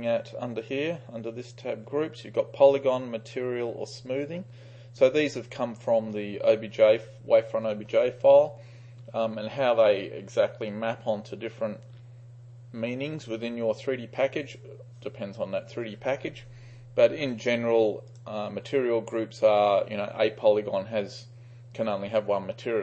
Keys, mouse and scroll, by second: 17.5-18.3 drag.